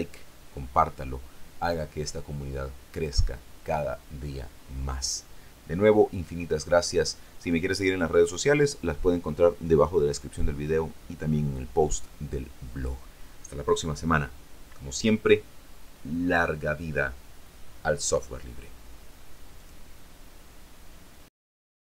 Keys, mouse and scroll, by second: 19.7 click, 21.9 click.